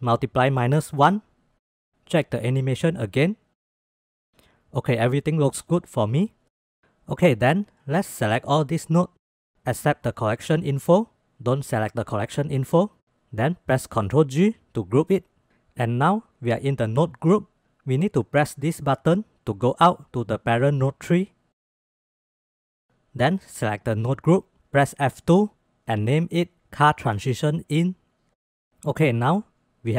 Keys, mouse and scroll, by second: 0.6-1.9 drag, 2.6-3.1 drag, 3.2 space, 4.5 space, 4.9-5.4 middle drag, 7.1-7.7 middle drag, 8.8-10.6 drag, 13.9 ctrl+g, 15.3 click, 21.0-21.6 drag, 21.7 click, 22.5-22.9 drag, 24.6 F2, 29.4 ctrl+s.